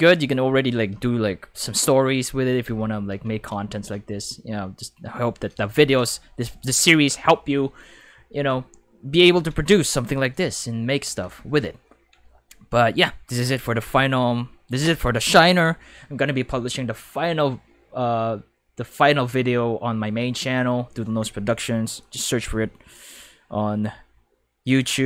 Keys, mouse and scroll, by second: 0.9 space, 2.6 space, 3.2 ctrl+s, 3.4 ctrl+s, 3.6 ctrl+s, 22.0 click.